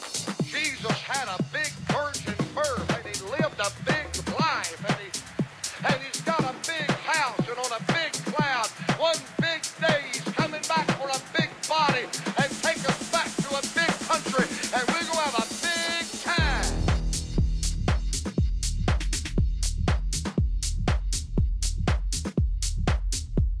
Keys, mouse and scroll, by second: 0.5 n, 1.4 KP_3, 1.4 KP_6, 2.4 KP_5, 3.6 KP_3, 4.8 KP_5, 6.5 z, 7.0 middle click, 13.9 Tab, 15.4 Tab, 16.2 a, 16.5 a, 18.6 n, 19.5-21.3 middle drag, 21.3-23.6 drag.